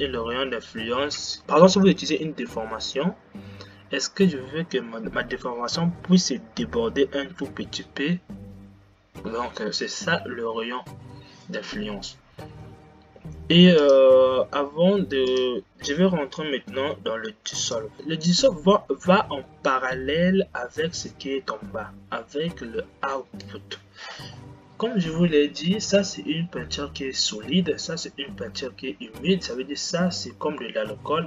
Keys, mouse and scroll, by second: 14.2-15.9 drag, 17.8 click, 18.0 scroll down 10, 18.2-21.0 drag, 21.0 scroll down 5.